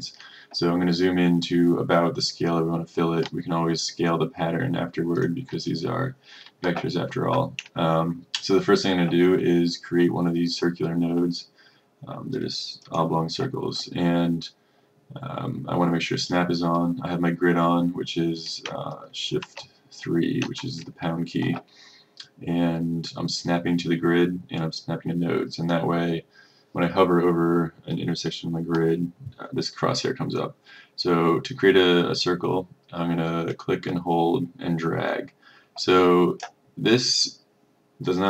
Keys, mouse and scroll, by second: 5.2 click, 19.5 shift+3, 20.5 shift+3, 33.6-36.5 drag.